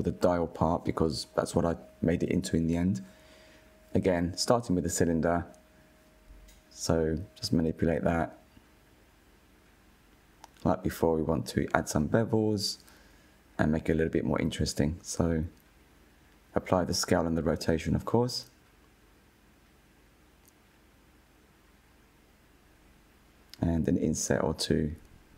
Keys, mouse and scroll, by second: 0.0 shift+a, 2.5 scroll down 3, 3.2 click, 4.5 click, 5.6 click, 5.8 scroll up 1, 6.0 s, 7.1 scroll up 3, 7.4 click, 7.9 s, 8.9 click, 9.9 Tab, 10.2 click, 11.1 scroll up 3, 11.3 click, 12.4 scroll down 1, 12.6 Tab, 12.9 middle click, 13.1 Tab, 13.4 drag, 13.8-14.5 middle drag, 14.5 click, 14.7 shift+middle click, 15.0 KP_1, 15.5 Tab, 15.8 /, 16.0 middle click, 16.2 ctrl+a, 16.9 ctrl+a, 17.4 Tab, 17.7 middle click, 18.1 KP_1, 18.6 /, 18.8 KP_1, 19.1 click, 19.5 ctrl+b, 20.4 alt+click, 20.6 ctrl+b, 21.5 ctrl+r, 22.0 s, 22.8 click, 23.2-23.6 middle drag, 23.6 3, 24.0 drag.